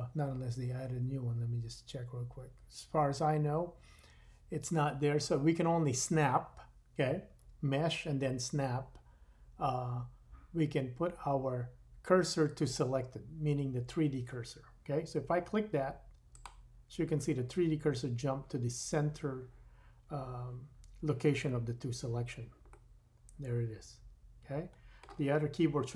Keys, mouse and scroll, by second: 22.7 middle click.